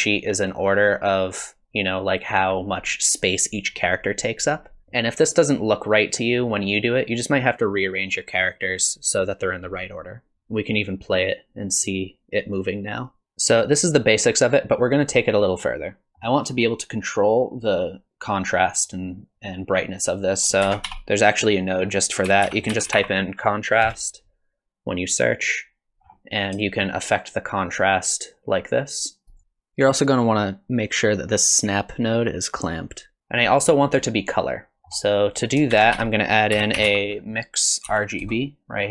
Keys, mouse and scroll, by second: 10.3 space, 15.9 middle click, 16.1 middle click, 20.3 click, 20.6 shift+a, 26.2-26.5 scroll up 4, 26.7 shift+click, 33.2 shift+click, 34.8 middle click, 34.8 scroll down 5, 35.2 click, 35.7 shift+a.